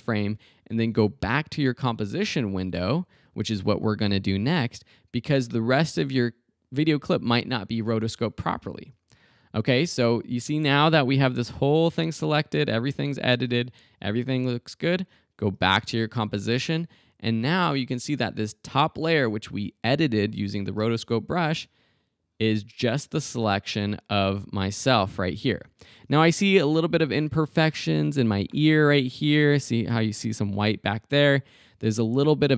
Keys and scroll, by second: 20.8 space, 26.0 space, 31.5 space.